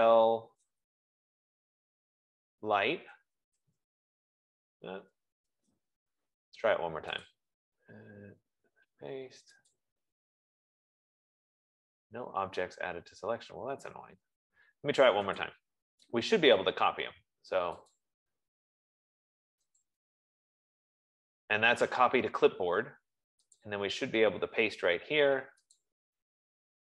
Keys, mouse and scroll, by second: 0.0-0.6 typing, 1.7-4.4 typing, 5.3 Escape, 7.7 click, 10.2 click, 14.3 Escape, 14.6 Escape, 14.8 Escape, 16.4 click, 18.5 click, 20.4 click, 20.7 F15, 24.3 click, 26.4 click.